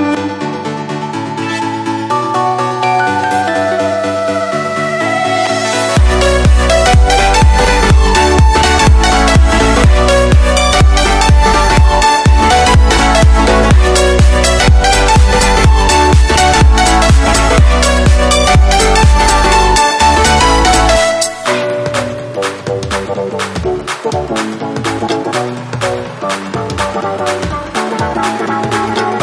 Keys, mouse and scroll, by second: 1.5 middle click, 1.7-3.4 drag, 2.2 c, 6.3 ctrl+z, 6.3 click, 7.3-10.8 drag, 11.9 a, 12.2 click, 13.8-15.7 middle drag, 16.2 middle click, 16.5 Tab, 16.6 middle click, 17.4-18.5 drag, 17.9 Tab, 18.0 middle click, 18.0 right click, 18.1 Tab, 18.8 a, 19.5-21.3 drag, 21.3-22.3 middle drag, 22.3 click, 23.0 a, 23.2 middle click, 23.3 Tab, 24.1 right click, 24.5-28.3 drag.